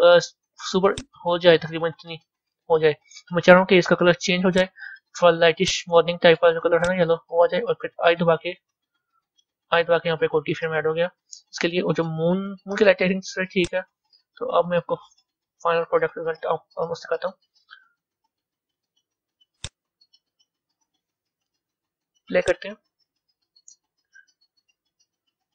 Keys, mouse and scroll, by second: 0.9-5.5 drag, 13.6-15.8 drag, 15.8 KP_0, 19.6-20.9 drag, 20.9 scroll down 2, 22.4-25.5 drag.